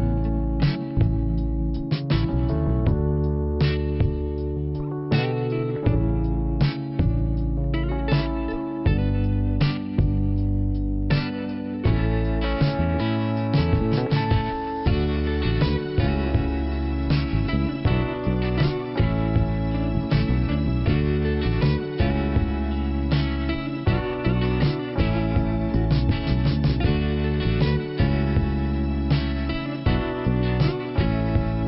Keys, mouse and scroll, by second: 0.6 click, 2.2 click, 2.3 click, 2.9 click, 2.9 click, 3.5 click, 4.2 click, 4.7 click, 4.8 click, 5.2 click, 5.2 double click, 6.0 scroll up 1, 6.2 double click, 7.8 alt+t, 9.3 click, 9.4 click, 9.8 click, 9.9 click, 10.9 scroll up 1, 12.2 click, 12.2 click, 13.8 click, 15.7 click, 18.7 click, 18.8 click, 19.1 right click, 19.2 double right click, 19.9 click, 23.0 m, 24.1 click, 24.2 click, 24.4 typing, 24.9-25.5 scroll up 1, 25.9 click, 26.0 click, 27.6 click, 30.3-31.0 scroll down 1, 31.2 p.